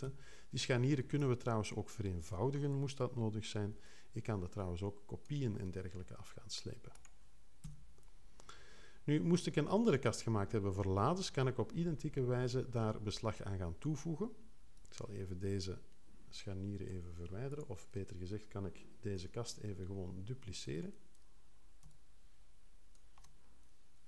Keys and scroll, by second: 0.0 6, 7.6 3, 19.1 0.